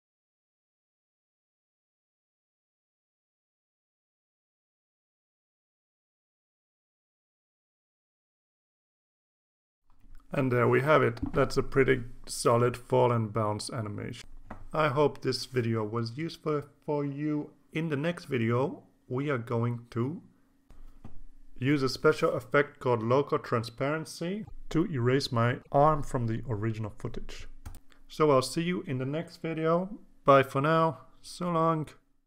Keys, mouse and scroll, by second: 1.0-2.1 drag, 3.0-4.5 drag, 4.8 click, 6.7 click, 8.6-10.9 drag, 32.0 click, 32.2 click.